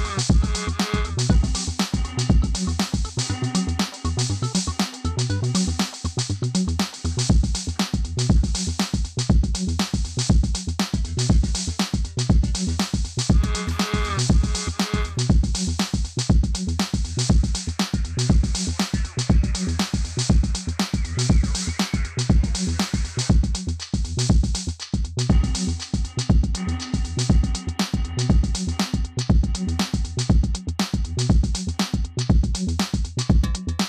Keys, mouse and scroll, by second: 4.6-11.2 drag, 11.2 2, 12.3-13.0 typing, 12.5-16.2 drag, 18.2 ctrl+d, 19.5 click, 20.2 ctrl+a, 21.1 ctrl+click, 26.3 click, 27.3 click, 28.5 ctrl+c, 28.8 click, 29.3 ctrl+v, 30.2-33.3 drag.